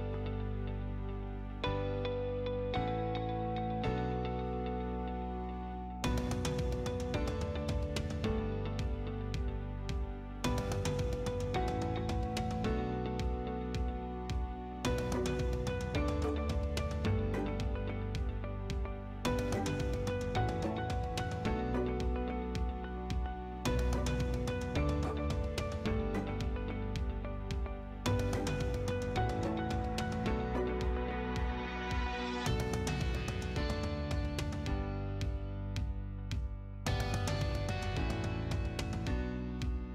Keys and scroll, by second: 5.1 t, 5.4 space, 14.1 Escape, 33.1 c, 33.7 space.